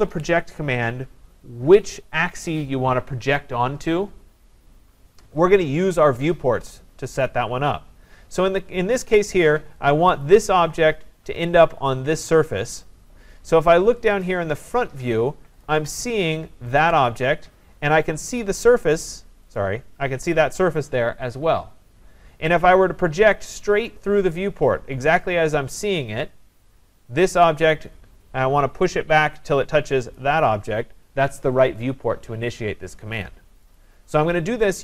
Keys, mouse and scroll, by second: 9.9 click, 14.2 click, 15.6 click, 16.8 click, 18.4 click, 19.6 click, 27.7 click, 30.2 click, 33.8 click.